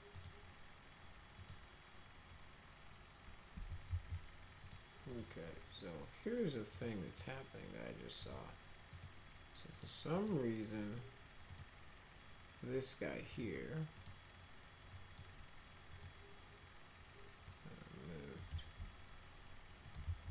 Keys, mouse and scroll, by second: 0.1 click, 1.4 click, 3.8 alt+x, 4.6 click, 5.1 click, 6.7 click, 7.0 click, 8.2 click, 8.9 click, 9.7 click, 10.1 click, 11.5 click, 13.3 click, 13.9 click, 14.9 drag, 15.9 click, 17.4 click, 19.8 click, 20.0 ctrl+z.